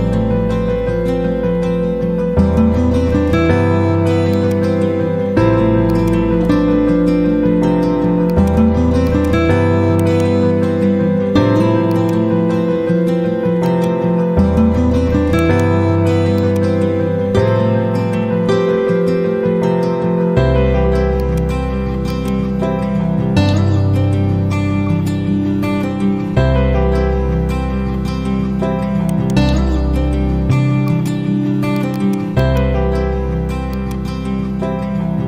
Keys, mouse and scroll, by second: 1.3-2.0 typing, 4.3-5.2 drag, 9.9 right click, 11.8-15.3 drag, 15.3 ctrl+right click, 16.3-18.8 drag, 18.8 Down, 21.1-24.5 drag, 24.2-25.0 typing, 29.0 right click, 30.8-32.9 drag.